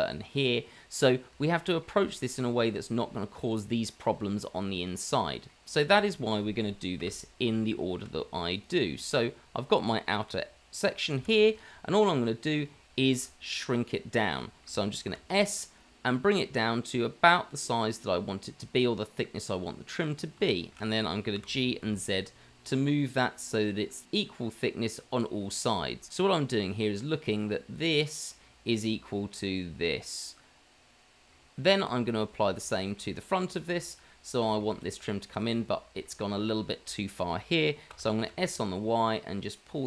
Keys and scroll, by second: 4.1 Tab, 6.2 Tab, 7.0 Delete, 8.0 Delete, 9.1 Delete, 10.3 g, 13.2 g, 15.1 s, 21.3 g, 31.3 ctrl+z, 32.9 ctrl+z, 37.9 s.